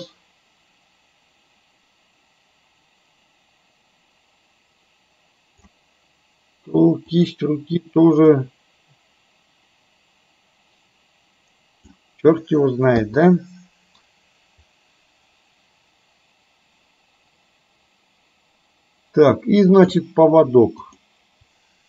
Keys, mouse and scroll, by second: 7.4 click, 8.4-12.1 drag, 13.0 i, 14.7-20.1 drag, 20.9 click.